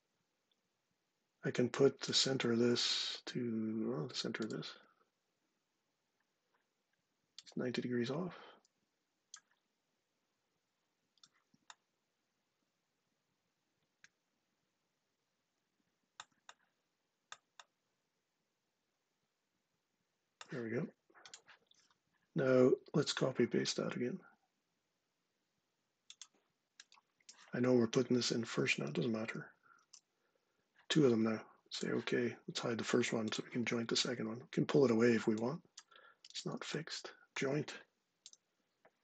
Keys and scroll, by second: 29.0 super+c, 29.6 super+v, 38.0 j.